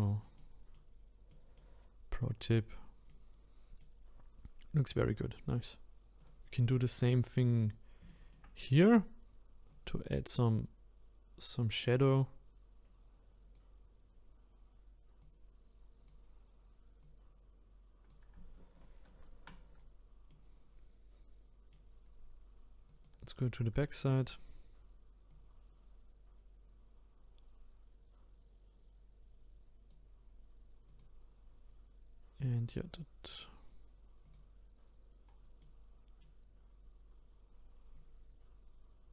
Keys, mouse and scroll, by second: 0.4-1.8 middle drag, 1.8-2.2 scroll down 5, 2.2 middle click, 3.1 middle click, 4.0 scroll up 2, 6.2-7.7 drag, 8.1 shift+middle click, 8.5-9.3 scroll up 4, 9.3-9.7 scroll up 1, 9.7-12.7 drag, 15.2-19.0 drag, 19.0 ctrl+z, 19.8-20.2 scroll down 2, 20.3-22.9 middle drag, 22.9 click, 23.4-23.9 scroll up 2, 23.9-28.3 shift+middle drag, 30.9 click, 33.3-34.3 drag, 35.3-35.6 scroll down 4, 35.6-36.7 middle drag, 36.7-37.9 scroll up 3, 37.9-39.1 drag.